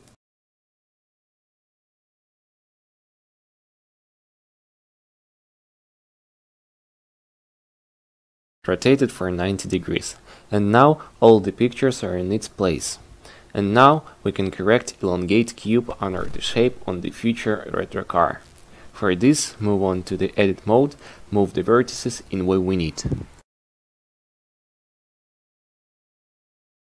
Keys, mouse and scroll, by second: 0.1 q, 1.9 click, 9.4-12.9 drag, 16.6 q, 18.7 Tab.